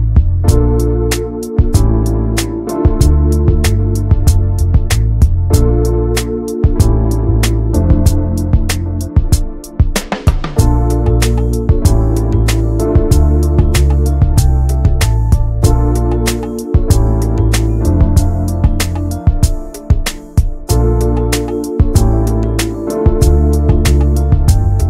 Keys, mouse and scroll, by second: 0.1 alt+shift+click, 0.5 alt+middle click, 0.8 alt+middle click, 1.0 alt+z, 1.2 alt+middle click, 2.1 ctrl+s, 2.4 alt+middle click, 2.7 alt+z, 3.2 alt+z, 3.6 shift+middle click, 3.8-4.7 scroll up 1, 4.7 e, 5.2 alt+s, 8.5 scroll down 2, 8.7 middle click, 9.2 alt+z, 9.4 middle click, 9.9-10.2 scroll up 1, 10.2 ctrl+s, 10.4 click, 10.7-11.2 scroll up 1, 11.2 click, 11.8 alt+shift+click, 12.0 alt+shift+click, 12.3 scroll down 2, 12.5-14.2 middle drag, 14.2-15.0 scroll up 3, 14.4 middle click, 15.1 shift+middle click, 16.0 e, 17.5 scroll down 3, 17.8 middle click, 17.9-18.7 scroll up 3, 18.2 shift+middle click, 18.7 2, 19.1 click, 19.9 click, 20.3 alt+shift+click, 20.6 scroll down 1, 20.8 alt+z, 21.0 middle click, 21.4 scroll down 1, 21.6-22.8 shift+middle drag, 22.8-23.2 scroll up 1, 23.2 middle click, 23.4 scroll up 1, 23.5 alt+z, 23.8 middle click, 24.6 ctrl+b.